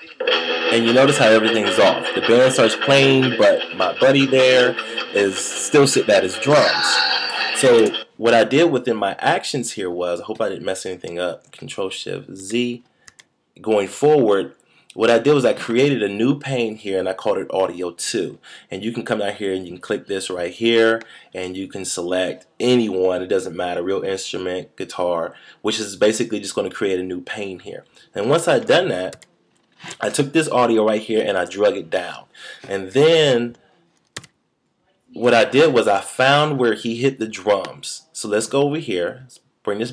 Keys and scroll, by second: 12.3 shift+super+z, 29.1 shift+super+z, 34.1 shift+super+z.